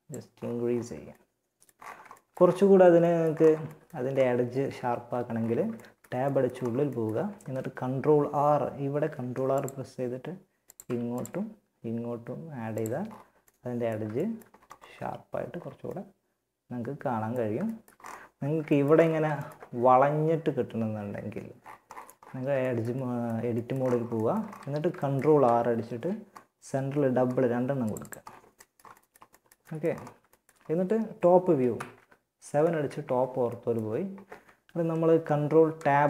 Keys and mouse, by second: 0.1 a, 4.0 Tab, 8.2 ctrl+r, 10.1 ctrl+r, 12.0 Tab, 21.1 middle click, 21.3 Tab, 23.8 a, 24.9 ctrl+r, 27.8 click, 30.9 KP_7, 35.0 ctrl+Tab.